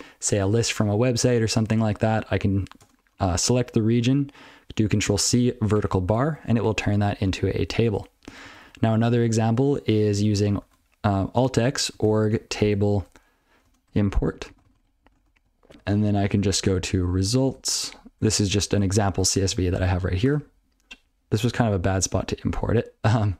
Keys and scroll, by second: 2.8 ctrl+space, 3.1 ctrl+e, 7.9 ctrl+/, 8.3 ctrl+n, 8.4 ctrl+n, 8.6 ctrl+n, 9.4 ctrl+p, 10.1 ctrl+n, 21.7 alt+x, 23.0 alt+x.